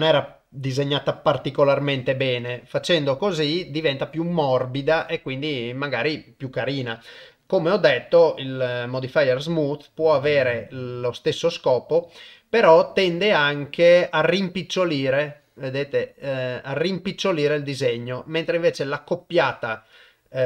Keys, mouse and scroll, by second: 6.7 click, 7.8-9.0 drag, 10.3-11.2 drag, 13.5-19.0 drag, 19.9-20.4 drag.